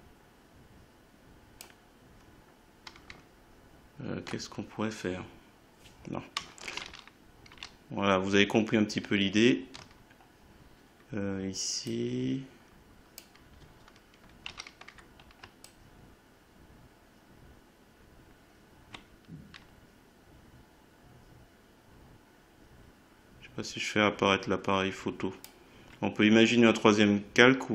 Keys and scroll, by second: 6.8 ctrl+z, 14.4 ctrl+z.